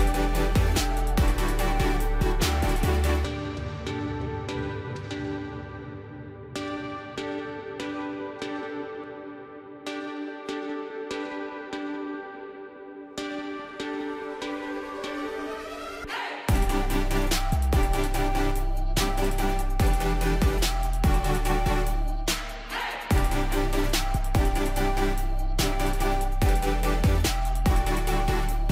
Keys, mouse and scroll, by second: 2.3-28.7 drag.